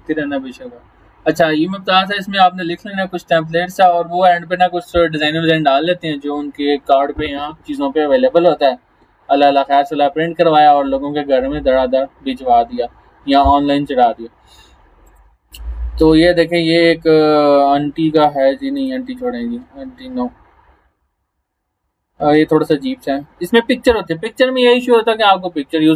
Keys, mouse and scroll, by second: 7.8 scroll down 1, 10.6 scroll down 1, 12.4-13.6 scroll down 3, 14.2 scroll down 1, 15.1 click, 18.8 click, 18.9 click, 20.7 scroll down 1, 21.2 scroll up 1, 22.0 scroll down 1.